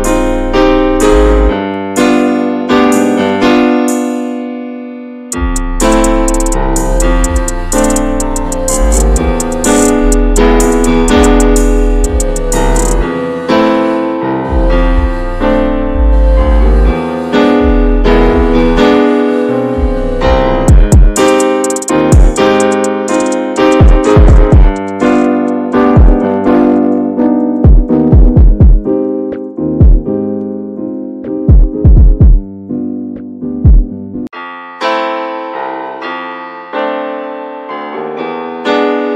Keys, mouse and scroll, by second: 1.7 shift+middle click, 2.6 click, 2.8 shift+middle click, 3.5-4.5 drag, 4.5 scroll down 5, 4.6 shift+middle click, 5.4 shift+middle click, 5.5-6.4 scroll up 3, 5.7 shift+middle click, 6.8 click, 7.1 scroll up 1, 7.2 shift+middle click, 7.4 ctrl+z, 8.8 click, 8.9 shift+middle click, 9.8 click, 9.9 shift+middle click, 10.7 click, 11.6 shift+middle click, 12.3 click, 12.4 shift+middle click, 13.2 click, 14.0 shift+middle click, 14.8 click, 14.9 shift+middle click, 15.6-17.2 drag, 17.2 shift+middle click, 17.8-18.8 drag, 18.8 scroll down 5, 19.0 shift+middle click, 19.5 scroll up 2, 19.6 shift+middle click, 20.2 scroll up 1, 20.5 middle click, 21.1-22.5 drag, 22.5 middle click, 23.0 shift+middle click, 23.4 click, 24.3-26.3 alt+middle drag, 26.3-27.8 drag, 27.8 right click, 28.2 click, 28.6 middle click, 29.0 click, 29.3 shift+middle click, 29.5 click, 29.8 shift+middle click, 30.2 click, 30.4 shift+middle click, 30.5-32.0 drag, 32.0 scroll down 2, 32.1 shift+middle click, 32.6 click, 32.9 shift+middle click, 33.2 scroll up 1, 33.3 middle click, 33.5 click, 34.0 shift+middle click, 34.3 click, 35.1 shift+middle click, 35.3 click, 36.1 middle click, 36.6 scroll up 1, 36.6 click, 36.8 shift+middle click, 37.4 click, 37.6-38.2 scroll down 2, 38.2 drag, 38.4 scroll up 2, 38.5-39.1 shift+middle drag, 39.1 scroll up 1.